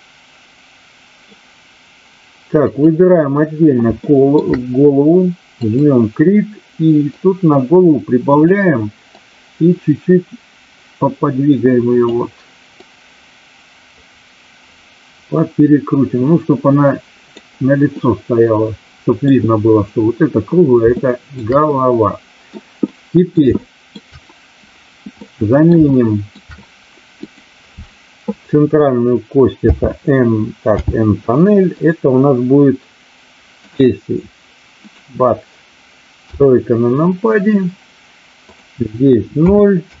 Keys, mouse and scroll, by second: 4.0 shift+middle click, 5.6 click, 7.1-8.5 drag, 9.0-12.0 drag, 12.6-17.4 drag, 17.9-19.2 middle drag, 21.0 shift+middle drag, 21.8-22.5 middle drag, 22.8-23.4 middle drag, 23.5-24.0 shift+middle drag, 25.2-25.8 middle drag, 25.9-26.4 shift+middle drag, 27.1 click, 29.6 n, 30.8 n, 31.9-33.8 drag, 36.1 KP_3, 38.4-40.0 drag.